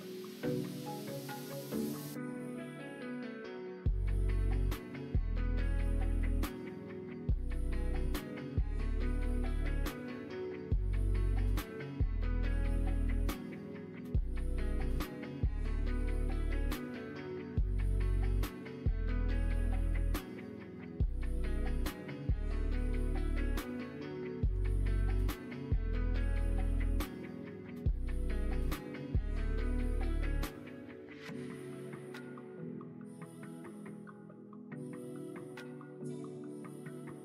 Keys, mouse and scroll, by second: 17.2 middle click, 18.4 middle click, 19.0 middle click, 19.6 middle click, 20.4 middle click, 22.6 alt+click.